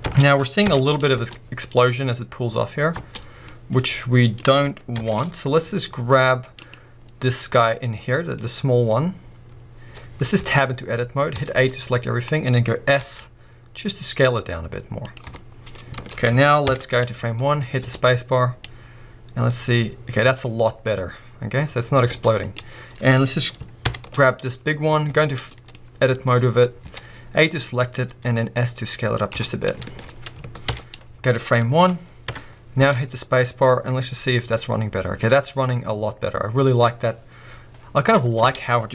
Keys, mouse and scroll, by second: 0.1 space, 0.6 shift+Left, 2.9 space, 3.3 scroll down 2, 3.5-5.0 middle drag, 5.0 shift+Left, 5.6-6.6 scroll up 1, 6.6-7.5 drag, 7.5 scroll up 1, 7.6 middle click, 11.7-13.0 middle drag, 15.1 click, 15.3 Tab, 15.5-15.9 scroll down 1, 15.9 alt+a, 16.7 shift+Left, 17.3 middle click, 17.8 scroll up 2, 22.1 space, 22.4-23.9 drag, 23.9 shift+Left, 24.9 b, 25.4 middle click, 26.2-26.8 scroll up 1, 27.6-28.1 scroll up 1, 29.3 click, 29.9 alt+a, 30.6 shift+Left, 31.5-32.3 scroll down 1, 32.3 KP_0, 32.8 space, 33.1 scroll up 4, 38.4 space.